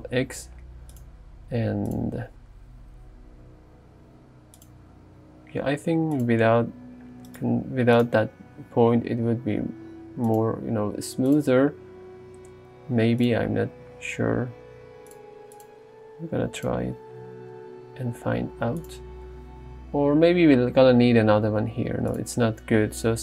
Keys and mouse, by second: 1.0 click, 3.3 g, 4.6 click, 5.3 r, 6.5 s, 9.0 g, 11.3 click, 15.6 click, 17.5 g, 18.8 click.